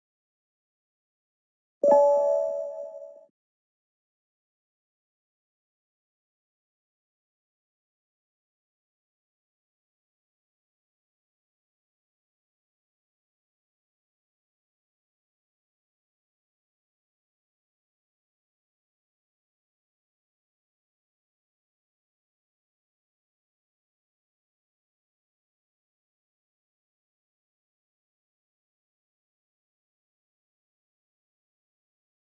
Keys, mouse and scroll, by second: 0.0-1.0 typing, 1.6 Return, 2.2 click, 6.8 click, 12.0 click, 13.0 click, 19.6 click, 20.0 Escape, 21.9 Escape, 23.2 click, 26.0 Right, 28.0 click, 28.2 click, 30.8 click.